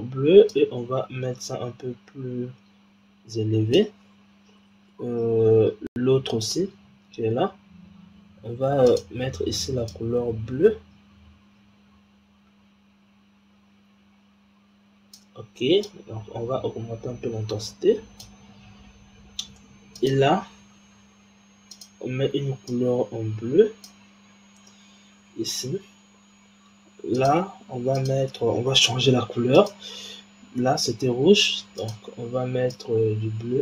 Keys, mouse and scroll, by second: 0.4 click, 5.1-6.2 scroll down 2, 6.2 click, 7.4-8.7 scroll up 4, 8.7 click, 15.8-18.6 drag, 18.6-19.9 scroll down 3, 19.9 click, 21.6 click, 24.2-25.7 scroll up 1, 27.0 scroll up 1, 27.0 click, 27.9 click, 29.4 click, 31.7 click.